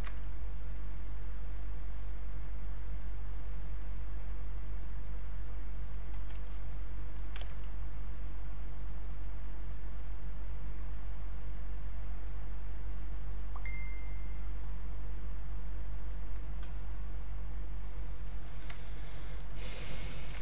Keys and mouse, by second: 0.0 ctrl+z, 0.4 click, 7.4 ctrl+z, 8.7-18.4 drag, 18.7 click, 18.8 ctrl+right click, 19.4 click, 20.1 alt+click.